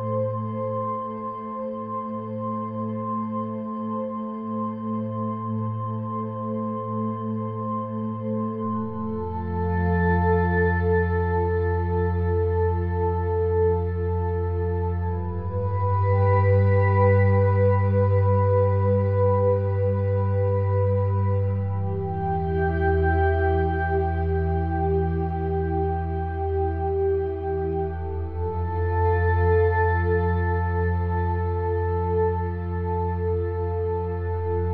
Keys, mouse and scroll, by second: 1.5-3.8 drag, 3.9-6.6 middle drag, 6.6-8.4 drag, 7.1 Tab, 8.4-10.1 middle drag, 11.4-15.1 middle drag, 15.5 middle click, 16.3 Tab, 18.3-20.2 drag, 19.1 Tab, 21.3 l, 22.6 shift+d, 24.3-26.1 drag, 26.3 p, 28.3-32.3 middle drag, 33.5-34.7 drag.